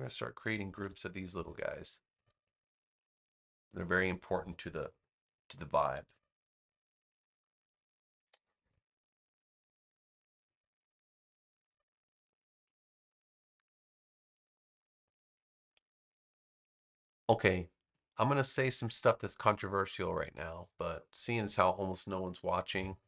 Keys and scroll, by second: 0.7 BackSpace.